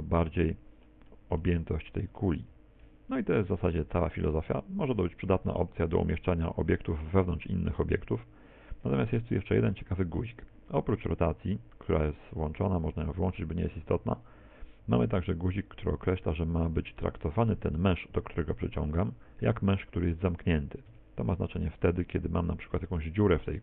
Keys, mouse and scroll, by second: 0.3 middle click, 1.1 middle click, 2.6 g, 8.7 middle click, 12.3 click, 20.3 right click, 20.9 Tab, 21.8 right click, 22.7 ctrl+KP_Add, 22.8 ctrl+KP_Add, 23.0 ctrl+KP_Add.